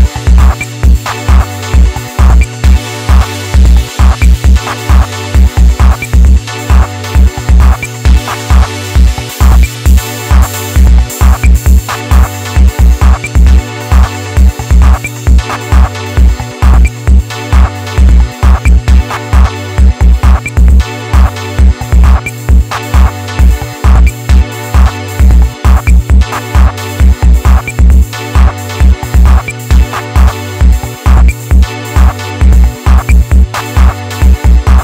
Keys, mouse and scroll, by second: 0.3 middle click, 1.0 s, 2.0 KP_1, 2.6-3.1 scroll down 1, 3.1-3.9 scroll up 2, 3.9 alt+z, 4.4 click, 5.6-6.8 middle drag, 6.8 ctrl+click, 7.9 KP_1, 8.7-9.6 scroll down 1, 9.6 s, 12.3 middle click, 12.8 KP_3, 13.5 r, 15.5 Tab, 15.9-16.5 middle drag, 16.5 KP_1, 16.8 scroll down 1, 17.0 alt+z, 17.5-18.7 shift+middle drag, 18.7-19.1 scroll up 3, 19.1-19.9 shift+middle drag, 19.9 Tab, 20.1-22.6 middle drag, 22.6 s, 23.7 KP_1, 24.3 shift+middle click, 24.8 scroll down 1, 25.1-26.4 shift+middle drag, 26.4 click, 31.2-32.7 scroll up 2, 32.7 click, 34.1 ctrl+r.